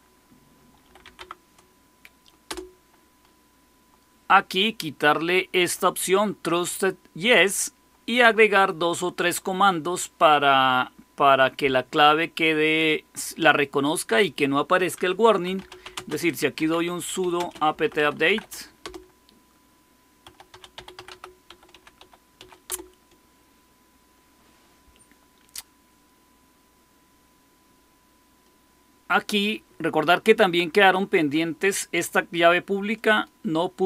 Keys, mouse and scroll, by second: 0.5-2.8 typing, 15.1-18.8 typing, 19.9-22.7 typing, 32.8-33.8 drag.